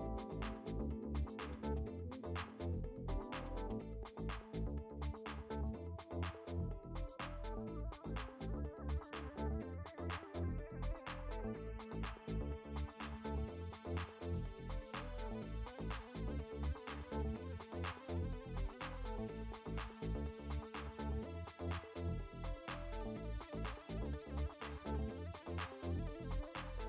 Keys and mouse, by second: 0.4 ctrl+BackSpace, 1.8 click, 4.5 KP_2, 5.9 click, 8.1 click, 13.4 b, 14.0 click, 16.9 space, 17.1 click, 18.2 click, 19.8 click, 20.9 click, 22.7 ctrl+z, 23.6 click, 26.4 ctrl+z.